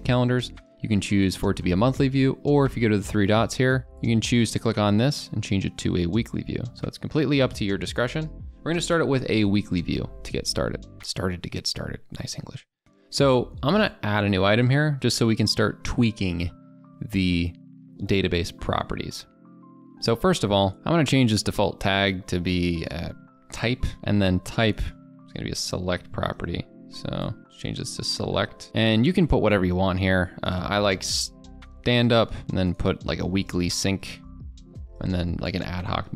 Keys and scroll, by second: 23.9 Caps_Lock.